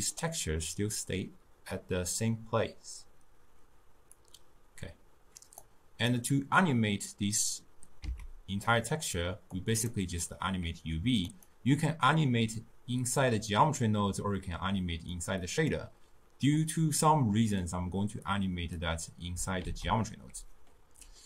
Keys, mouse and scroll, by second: 4.2-8.1 drag, 8.1 x, 8.7 middle click, 9.6 click, 11.3 click, 15.2 drag, 18.3-19.7 drag, 19.7 ctrl+a.